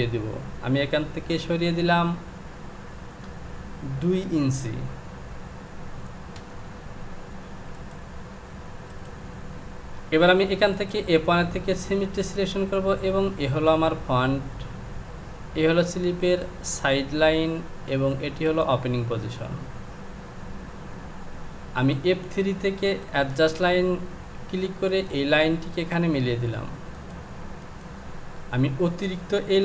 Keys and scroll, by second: 2.1 Down.